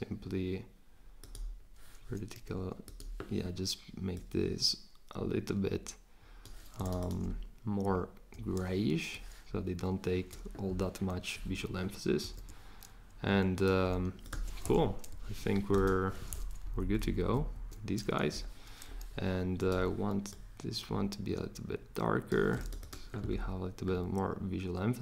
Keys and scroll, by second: 12.2 super+g, 16.6 Down, 17.3 shift+Up.